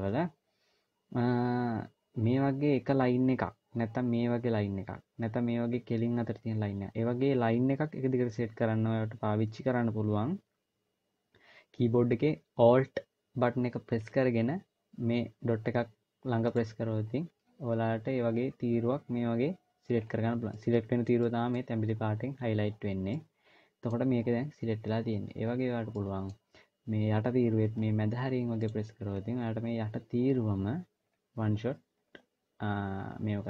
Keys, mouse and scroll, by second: 16.3 alt+click, 19.8 scroll down 2, 20.3 middle click, 20.3 scroll down 1, 21.0 middle click, 21.5 scroll up 1, 22.8 middle click, 25.2-25.8 scroll up 1, 25.8 middle click, 26.2-27.4 scroll up 2, 28.3 alt+click, 30.8-31.4 scroll down 1, 31.4-31.8 scroll down 1, 31.8-33.4 scroll up 1.